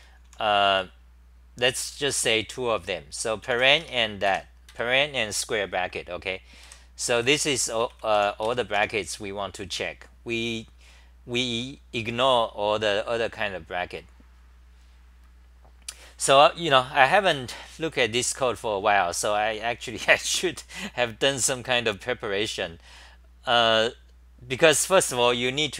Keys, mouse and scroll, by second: 0.0-1.2 typing, 3.8 Home, 4.2 2, 4.7 ctrl+g, 6.6-8.9 typing, 13.1 typing, 13.4-16.3 scroll down 23, 15.5 typing, 17.3-17.7 scroll down 8, 19.1 scroll down 4.